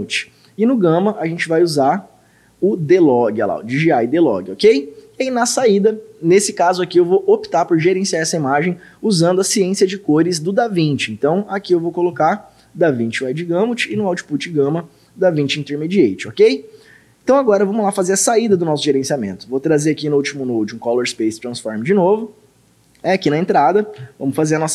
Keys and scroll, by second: 1.2 d, 11.7 d, 13.9 d, 24.0 d.